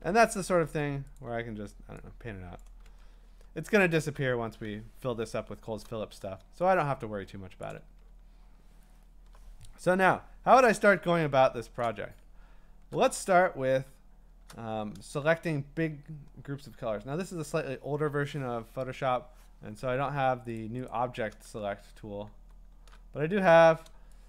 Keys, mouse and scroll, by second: 1.2 alt+click, 2.6 click, 3.1-4.3 scroll, 7.7 click, 8.1 scroll, 10.6-12.3 typing, 11.8 click, 12.4 scroll, 13.9 scroll, 20.6 click, 20.9 click, 21.7 w, 22.3 w, 22.7 w.